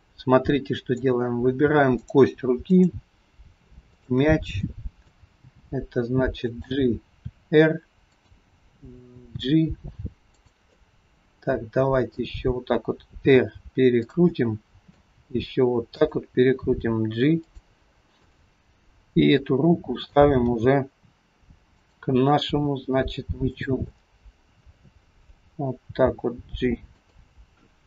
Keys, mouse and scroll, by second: 0.1 middle click, 1.3-2.0 scroll up 3, 2.0 click, 2.8 click, 4.0 shift+click, 4.8 middle click, 5.4 g, 7.3 r, 9.3 g, 10.8 middle click, 13.3 r, 14.3 middle click, 15.3 r, 16.6 g, 18.3 click, 18.8 scroll up 1, 18.9 middle click, 20.6 g, 22.5 r, 24.0 middle click, 26.0 g.